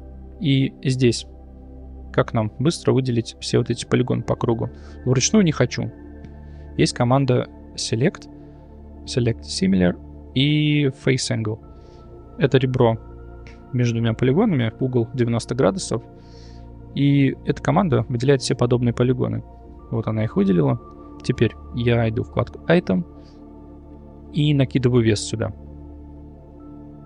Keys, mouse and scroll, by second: 0.0 Tab, 0.6 2, 1.7 middle click, 5.1 click, 7.7-11.2 drag, 11.8-12.2 middle drag, 18.4 middle click, 19.7-21.1 middle drag, 22.3 click, 24.5 click, 25.8 shift+middle click.